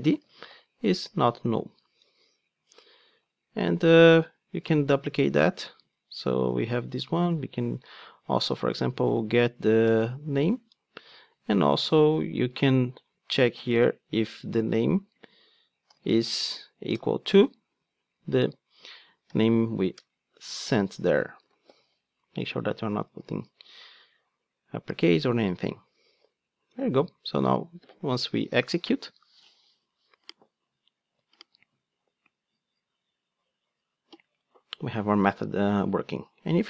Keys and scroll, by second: 5.9 super+d, 10.4 Return, 11.1 super+d, 16.9 Return, 20.5 super+z, 23.1 alt+super+l, 27.6 ctrl+d.